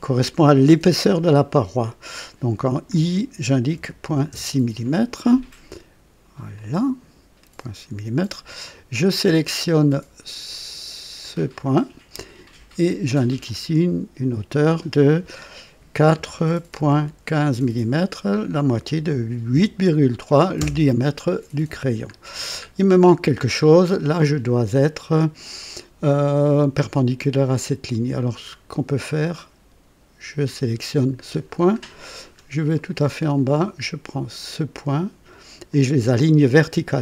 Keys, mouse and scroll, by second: 2.8 i, 3.7 KP_Decimal, 4.0 KP_6, 4.3 Return, 6.5-8.5 drag, 8.9 click, 11.2 click, 13.4 click, 16.1 KP_4, 16.8 KP_Decimal, 17.6 KP_1, 19.5 KP_5, 20.6 Return, 21.6 typing, 22.1-22.5 scroll down 1, 23.2-23.6 scroll down 1, 28.5 scroll up 1, 30.5 click, 31.2-32.5 scroll down 3, 32.8-33.7 right drag, 35.7 click.